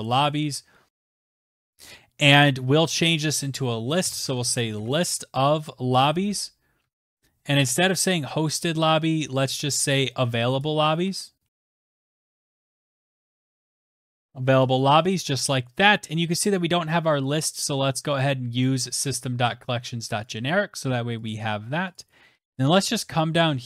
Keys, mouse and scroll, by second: 0.8-2.5 typing, 0.9 click, 2.8 Right, 2.9 Right, 3.1 Right, 3.2 Right, 3.4 Right, 4.2 shift+., 7.8 click, 8.6 a, 11.3-12.9 typing, 11.5 click, 12.8 click, 13.4 click, 13.6 click, 13.7 click, 14.1 click, 14.5 click, 15.4 click, 16.3-17.1 scroll, 17.4 click, 18.6 click, 19.1 click, 19.3 click, 19.8 ctrl+c, 20.0 scroll, 20.0-21.4 scroll down 28, 21.8-22.8 scroll, 23.4 click.